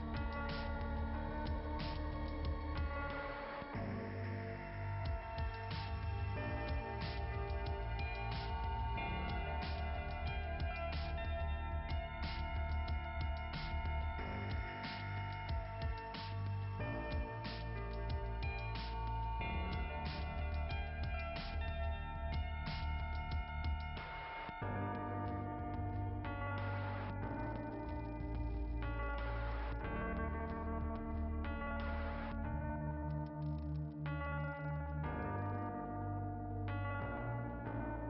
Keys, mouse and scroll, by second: 1.3 click, 6.8 click, 8.3 click, 9.3 click, 13.4-13.8 scroll up 3, 17.0-17.4 scroll up 2, 30.8 click, 33.5 click, 33.7-35.6 scroll down 7, 33.8 click, 34.1 click, 34.4 click, 34.8 click, 35.1 click, 35.4 click, 36.1 click, 36.1 scroll down 1, 36.4 click, 36.5 click, 37.8 click.